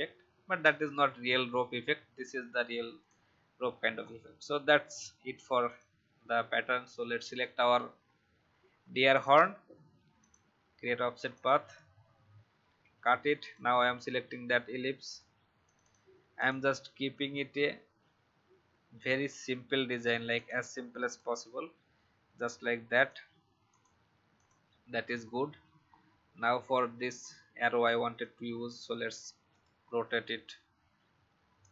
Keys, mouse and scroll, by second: 1.0-3.0 alt+scroll down 1, 3.0 click, 4.0-4.6 alt+scroll up 1, 4.7-5.6 alt+scroll down 1, 5.6-10.1 drag, 12.6 ctrl+x, 13.4 click, 16.8 ctrl+f, 19.2 click, 25.2 alt+scroll up 1, 25.9-26.7 alt+scroll down 1, 26.7 click, 28.2 shift+click, 29.4 right click, 31.6 click.